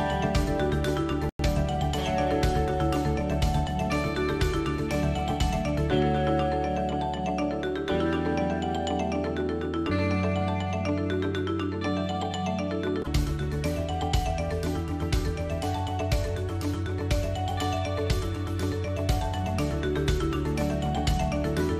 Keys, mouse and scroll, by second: 0.0 Tab, 3.3 middle click, 4.5-6.9 middle drag, 5.8 Tab, 6.9 ctrl+r, 10.5 shift+z, 10.8 shift+z, 12.6 shift+z, 12.7 shift+z, 13.5 middle click, 13.5 shift+z, 16.8 shift+z, 17.1 shift+z, 17.8 s, 21.2 Tab.